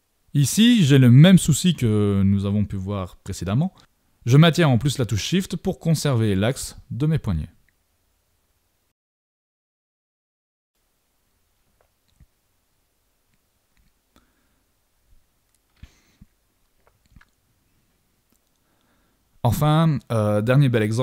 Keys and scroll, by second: 15.3 shift+super+z, 18.8 super+-, 19.3 super+=.